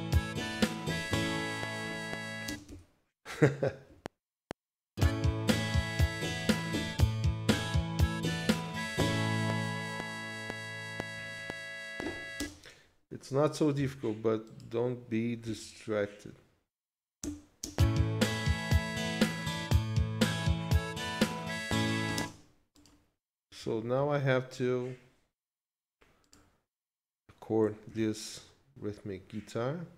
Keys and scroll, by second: 2.5 space, 2.6 z, 3.9 F7, 12.4 space, 15.4 q, 17.2 Return, 17.6 space, 22.2 space, 27.9 ctrl+s.